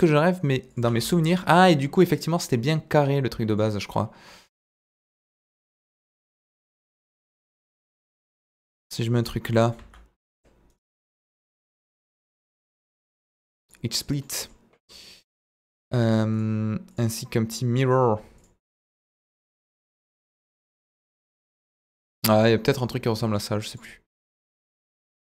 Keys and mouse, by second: 0.7 click, 0.8 s, 0.9 z, 2.3 click, 2.7-3.5 middle drag, 4.6 KP_4, 5.7 KP_7, 6.4 z, 8.0 g, 9.2 drag, 9.5 middle drag, 9.8 z, 10.8 right click, 11.9 drag, 12.3 click, 14.0 click, 14.2 middle drag, 15.0 click, 16.3 click, 18.4 drag, 21.0 drag, 21.3-21.6 middle drag, 21.8 drag, 22.0-22.4 middle drag, 23.6 click, 24.6-25.2 drag.